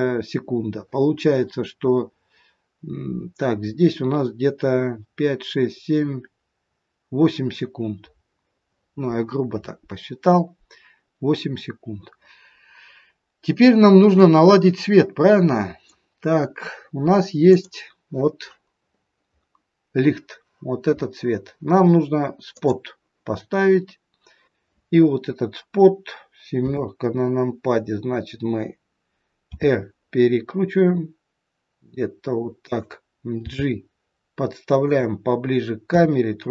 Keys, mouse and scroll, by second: 13.2-14.2 scroll down 6, 14.2 middle click, 17.4 click, 18.9-20.5 scroll up 6, 20.5-22.1 scroll up 2, 22.4 click, 26.5 KP_7, 29.5 r, 33.4 g, 35.8 KP_3.